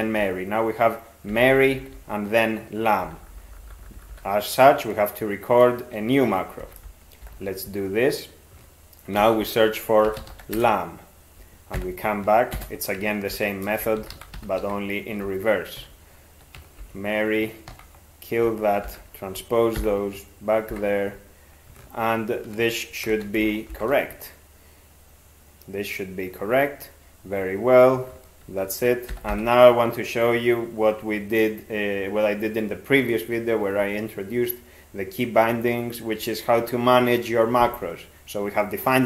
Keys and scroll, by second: 1.3 ctrl+n, 1.5 ctrl+n, 1.7 ctrl+n, 1.8 ctrl+n, 2.0 ctrl+n, 3.1 ctrl+p, 3.2 ctrl+p, 3.4 ctrl+p, 3.5 ctrl+p, 3.7 ctrl+p, 4.0 ctrl+p, 4.1 ctrl+p, 6.6 ctrl+x, 7.3 (, 9.2 ctrl+s, 9.9-11.1 typing, 11.8 alt+b, 12.6 ctrl+space, 13.3 ctrl+r, 13.7-15.1 typing, 15.8 alt+f, 16.8 ctrl+f, 17.7 ctrl+w, 18.9 alt+t, 23.1 ctrl+x, 23.7 ), 29.1 ctrl+n, 29.3 ctrl+n.